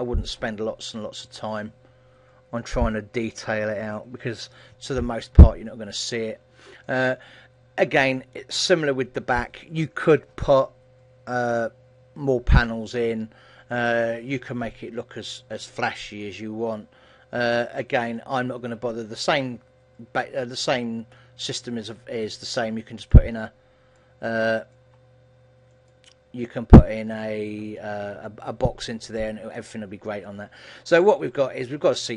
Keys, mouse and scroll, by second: 1.8 click, 5.6 middle click, 7.8-8.4 scroll up 3, 8.4 middle click, 17.8-19.4 scroll down 3, 18.2 middle click, 26.7 middle click, 26.7 click, 28.0 middle click, 29.2-29.7 scroll up 3, 29.7 middle click, 30.4 shift+middle click, 31.2-32.0 scroll down 2, 31.6 middle click.